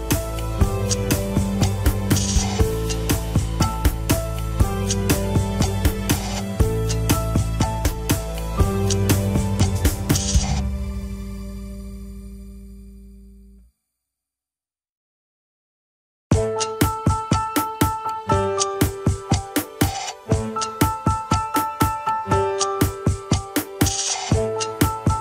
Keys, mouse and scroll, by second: 0.3 shift+middle click, 0.6 alt+z, 1.0 click, 1.4 Tab, 1.6 alt+z, 1.9 click, 2.2 alt+z, 2.4-2.7 scroll up 3, 2.7 r, 3.5 alt+z, 3.9 alt+z, 4.1-6.3 middle drag, 6.6-7.3 scroll down 12, 6.8 KP_1, 7.3 Tab, 7.6 shift+middle click, 7.8 scroll up 1, 8.1 ctrl+s, 9.4 click, 9.9 shift+click, 10.3 click, 10.7 scroll down 4, 11.0 ctrl+Tab, 11.2 shift+middle click, 11.4 scroll up 1, 11.7 click, 12.5 g, 16.3 scroll down 3, 16.7-17.2 shift+middle drag, 17.2-17.7 drag, 17.7-18.1 middle drag, 18.1 scroll up 1, 18.5 KP_1, 18.8-19.4 scroll up 3, 19.0 shift+middle click, 19.8 shift+click, 20.4 shift+middle click, 21.2 shift+click, 21.7 scroll down 3, 21.9-24.7 middle drag, 24.7-25.1 shift+drag.